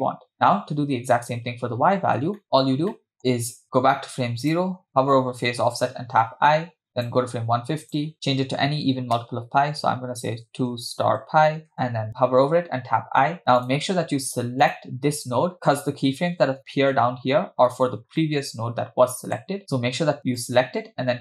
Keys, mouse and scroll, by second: 2.4 middle click, 2.4 space, 2.9 middle click, 3.2 scroll up 6, 4.5 click, 6.9 i, 7.0 click, 7.8-11.8 drag, 12.8 i, 13.6 click, 14.7-15.2 drag, 18.2-19.6 middle drag, 20.4 click.